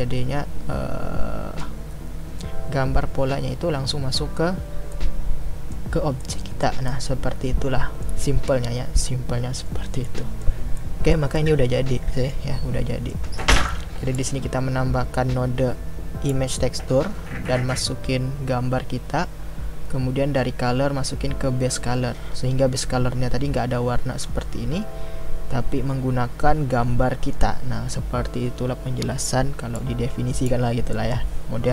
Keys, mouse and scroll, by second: 5.0-14.1 middle drag, 14.1-31.7 drag.